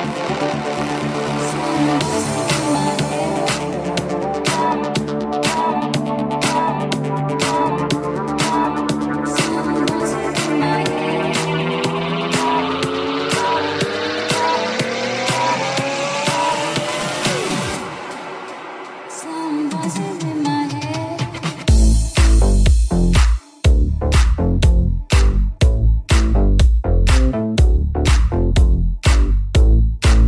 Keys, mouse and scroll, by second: 25.6-30.2 drag.